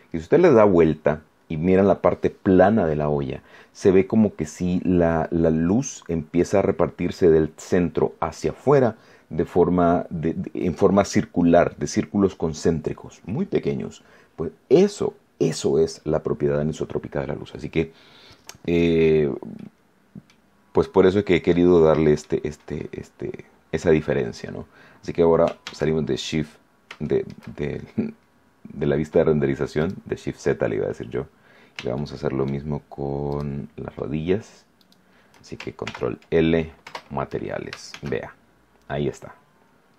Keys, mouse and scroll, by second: 19.5 click, 19.6 middle click, 20.9-21.2 scroll down 1, 21.4 middle click, 25.6 shift+z, 26.5 scroll up 1, 27.0 shift+click, 29.8 right click, 31.2 scroll down 2, 31.9 shift+middle click, 33.2 shift+right click, 34.8 shift+right click, 35.8 ctrl+l, 36.8 Return, 37.8 shift+z, 39.3-39.7 scroll down 2, 39.8-39.9 scroll up 2.